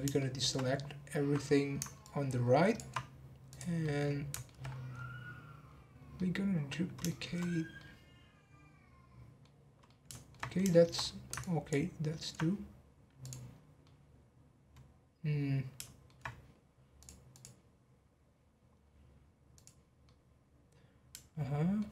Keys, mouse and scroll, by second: 0.2 shift+middle click, 0.6 scroll down 2, 2.0 ctrl+click, 3.5 click, 3.8 middle click, 4.6-5.0 scroll up 11, 5.7-6.1 scroll down 3, 6.1 middle click, 6.7-7.0 scroll down 1, 7.0-7.4 shift+middle drag, 7.4-7.7 scroll down 1, 7.7-10.5 middle drag, 10.5-11.0 scroll up 5, 10.7 shift+middle click, 11.4 ctrl+click, 13.2 click, 13.5 scroll down 2, 13.8-16.3 middle drag, 16.3-17.0 scroll up 1, 17.0-18.7 drag, 18.7-19.5 scroll down 1, 19.5 click, 20.0-21.9 middle drag.